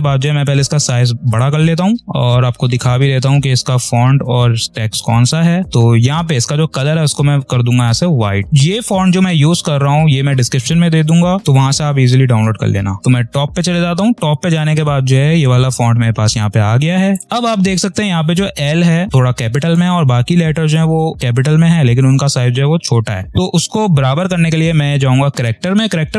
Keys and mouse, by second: 0.1 click, 2.9-5.6 ctrl+drag, 6.1 ctrl+a, 7.6 click, 8.4 ctrl+a, 8.6-16.0 drag, 17.2 ctrl+a, 24.0 click.